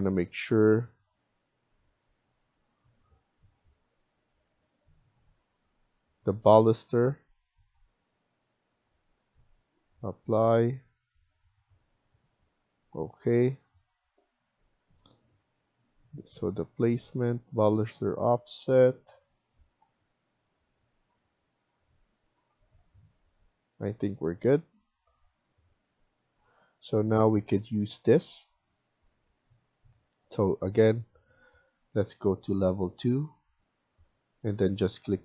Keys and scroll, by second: 27.8 Escape, 31.8 Escape.